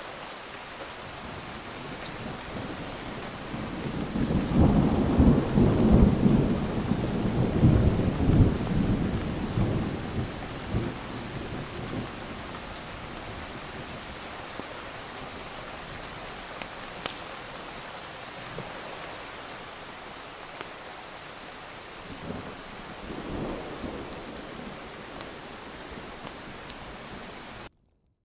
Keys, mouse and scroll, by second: 1.1 click, 2.4-2.9 ctrl+scroll down 2, 2.9-4.0 drag, 5.2 scroll up 2, 6.5 click, 8.2-9.5 typing, 10.2 click, 12.2 right click, 12.5-14.5 drag, 15.9 right click, 16.3-17.9 drag, 21.5 click.